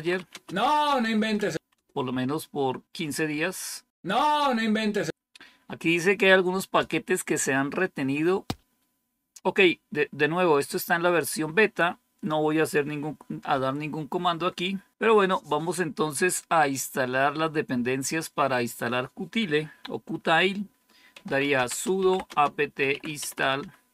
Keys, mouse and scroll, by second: 0.0-1.9 typing, 20.8-23.9 typing.